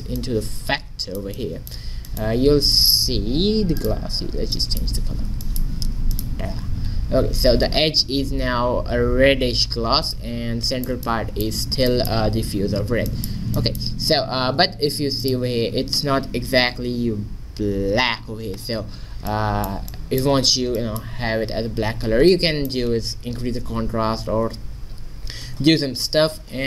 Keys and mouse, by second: 0.2-1.5 drag, 3.8 click, 6.2-8.0 drag, 15.3-17.1 drag, 18.8-22.5 middle drag, 23.6 middle click.